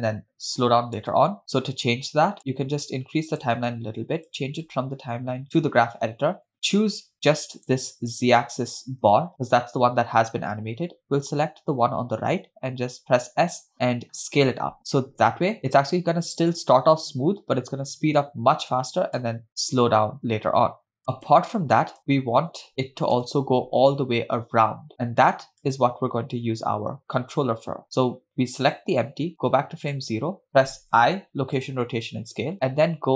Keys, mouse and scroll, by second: 1.4 space, 2.4-3.6 drag, 5.7 click, 6.7-7.4 scroll down 1, 8.0 click, 9.3-10.5 scroll down 1, 10.5-12.3 scroll down 1, 13.2 s, 19.5 space, 21.0 KP_0, 21.5 space, 22.1 space, 23.3 KP_0, 25.7 click, 28.7 click, 30.2 drag, 31.1 i.